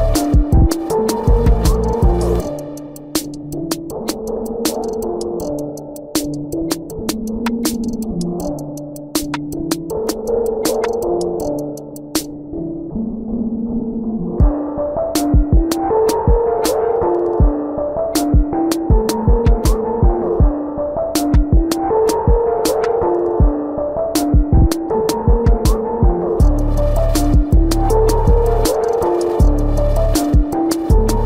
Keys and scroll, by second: 7.5 space, 8.6 ctrl+=, 10.1 space, 11.1 ctrl+alt+z, 11.8 space, 13.4 ctrl+alt+z, 15.4 space, 16.6 space, 17.4 space, 17.7 space, 18.4 ctrl+=, 20.1 ctrl+alt+z, 24.8 space.